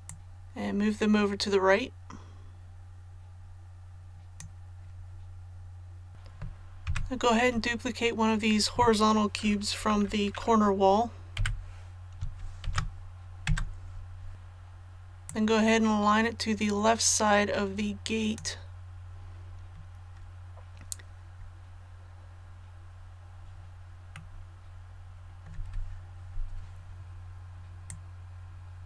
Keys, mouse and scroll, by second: 0.0-4.7 drag, 6.8 a, 11.3 l, 12.6 shift+d, 14.3-19.2 drag, 24.2-26.2 middle drag, 27.9-28.8 drag.